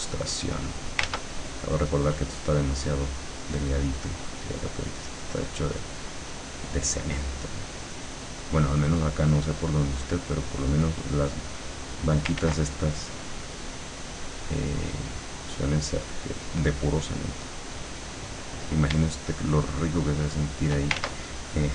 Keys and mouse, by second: 1.1 ctrl+z, 1.8 click, 3.3-7.0 drag, 8.2 click, 10.4 click, 11.5 click, 12.5 ctrl+z, 13.0 ctrl+click, 15.0 click, 19.4-20.9 shift+drag, 21.0 ctrl+shift+z.